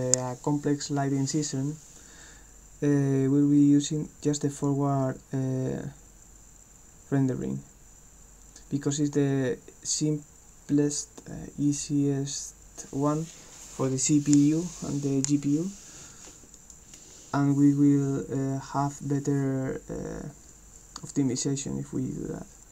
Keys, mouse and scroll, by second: 4.5 click, 16.6 click.